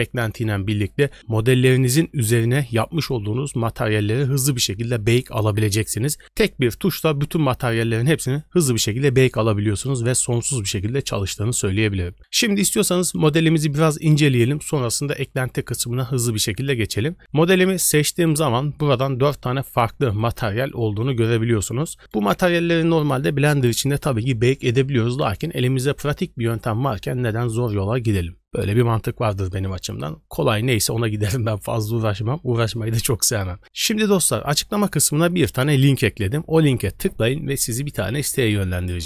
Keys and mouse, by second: 19.7 click, 20.1 click, 20.5 click, 20.9 click.